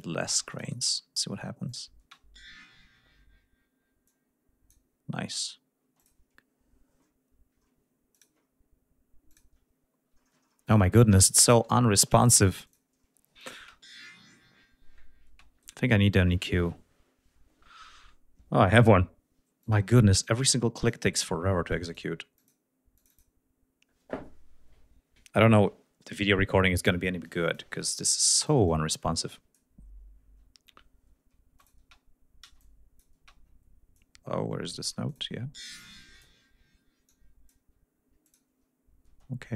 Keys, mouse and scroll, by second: 0.3 space, 0.5 click, 1.7 click, 2.1 space, 4.1 click, 5.9 space, 6.0 click, 8.2 click, 9.3 click, 12.7 click, 13.4-18.9 drag, 19.7 click, 20.3 click, 21.7 right click, 21.9 click, 22.4 click, 23.0-25.3 drag, 27.3 click, 28.3-29.8 drag, 31.2 space, 31.6 click, 32.5 space, 32.6-33.2 drag, 33.2 space, 34.0 click, 35.1 click, 36.0 click, 37.1-37.7 drag, 38.3 click.